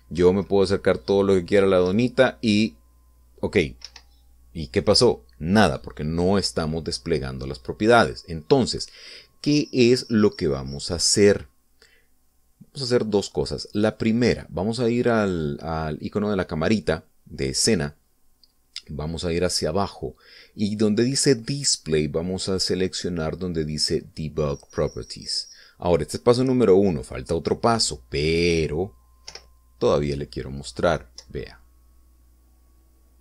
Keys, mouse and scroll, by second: 1.2 Right, 4.8 Escape, 13.3-13.6 scroll up 2, 13.6-14.9 scroll down 2, 14.9 click, 19.3-19.9 scroll down 2, 26.0 click, 30.3 p, 32.3 Up.